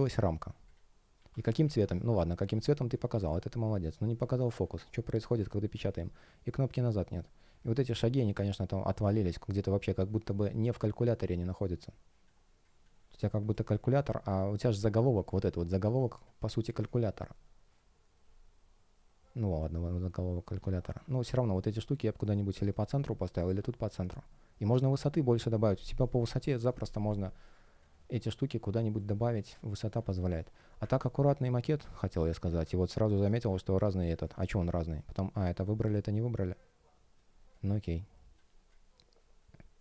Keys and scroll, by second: 4.0 space, 5.8 space, 13.4 space, 31.1 space.